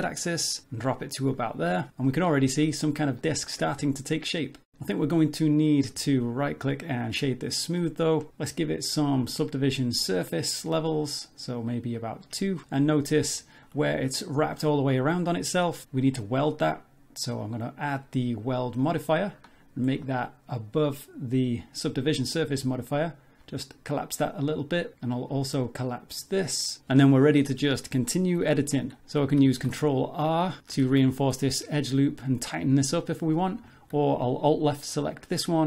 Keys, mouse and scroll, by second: 2.4 scroll down 2, 2.7 middle click, 3.6 scroll down 3, 3.8 middle click, 5.9 Tab, 6.4 right click, 7.8 middle click, 8.9 click, 11.9 click, 12.6 middle click, 13.4 shift+middle click, 17.4 click, 19.9-20.5 scroll down 6, 21.0 click, 22.4-23.1 scroll up 4, 23.4 click, 24.4-24.9 scroll up 2, 26.6 shift+middle click, 26.6 scroll up 3, 29.0 ctrl+z, 29.6 ctrl+r, 30.8 ctrl+z, 33.7 alt+click.